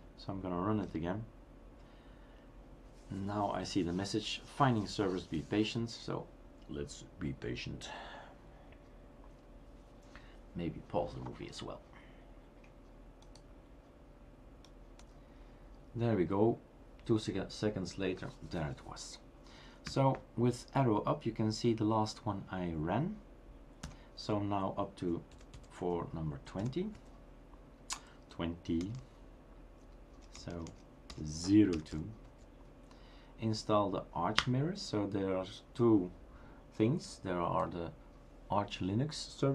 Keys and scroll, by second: 0.9 Return, 19.9 Up, 23.8 typing, 25.3-26.0 typing, 27.7-32.7 typing, 34.4 Return.